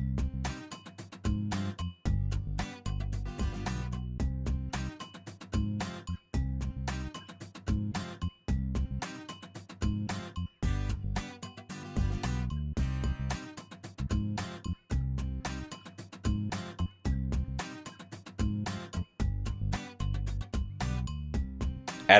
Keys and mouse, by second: 3.7 alt+click, 6.6 alt+shift+click, 7.0 shift+click, 8.0 r, 10.6 g, 11.6 g, 11.8 Tab, 12.0 Tab, 12.7 alt+click, 13.5 r, 15.1 s, 17.6-22.1 middle drag, 17.8 Tab, 21.1 Tab, 21.5 Tab.